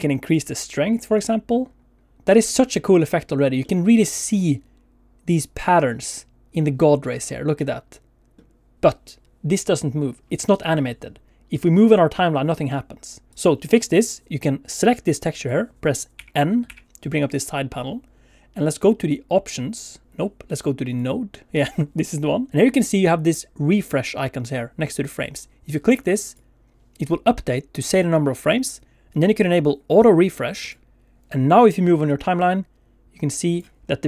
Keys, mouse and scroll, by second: 0.3 click, 2.1 middle click, 3.3 scroll up 1, 3.6 middle click, 7.6 middle click, 8.7 middle click, 11.5 click, 13.3 click, 14.7 click, 16.2 n, 16.7 n, 19.7 click, 21.1 click, 31.0 click, 32.1 click, 33.8 scroll up 4.